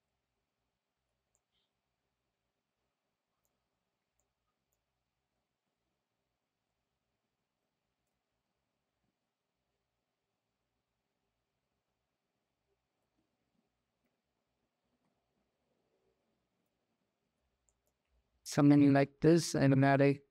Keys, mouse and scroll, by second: 0.6 g, 1.1-1.7 middle drag, 1.7-3.3 drag, 4.0-4.5 drag, 5.1 click, 5.4 s, 7.1 g, 8.2 s, 13.0 ctrl+z, 13.3 s, 14.0 ctrl+z, 14.8 s, 16.7 g, 17.5 click, 19.0 shift+a.